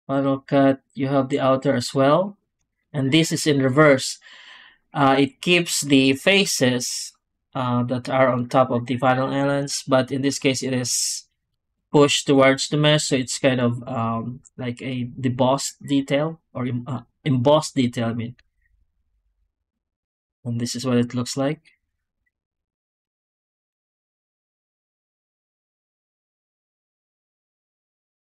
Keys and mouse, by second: 11.6-12.9 d, 11.8 click, 12.4 right click, 19.0 z, 20.1 g, 21.2 click, 22.1 z, 23.3 z, 25.7 click.